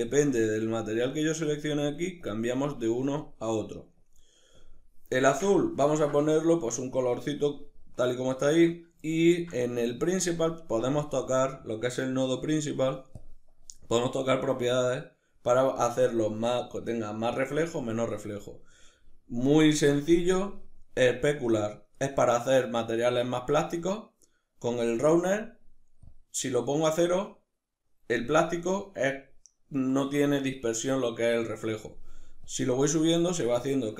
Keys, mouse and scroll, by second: 0.3 click, 0.7 click, 1.1 click, 1.5 click, 1.9 click, 2.2 click, 2.8 click, 3.6 click, 4.2 click, 5.2-12.9 middle drag, 12.9 click, 25.6-33.9 drag.